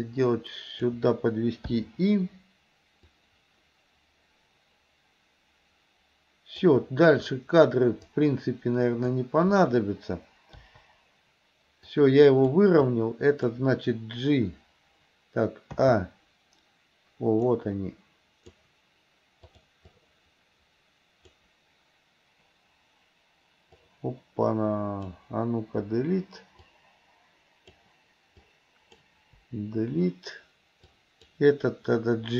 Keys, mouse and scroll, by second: 3.2-6.8 drag, 8.1-9.2 drag, 10.7 Delete, 12.0 click, 12.9 click, 15.8 a, 17.5-18.7 drag, 19.5 click, 19.9-21.4 drag, 23.8-25.2 drag, 25.9 Delete, 26.7-27.9 drag, 28.4-29.1 drag, 29.4 Delete, 30.9-31.4 drag.